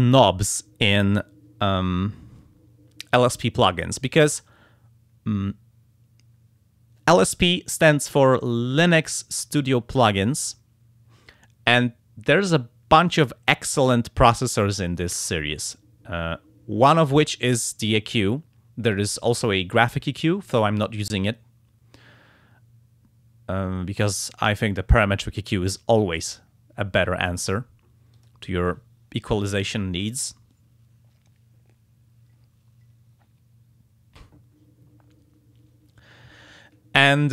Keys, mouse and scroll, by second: 28.1 click.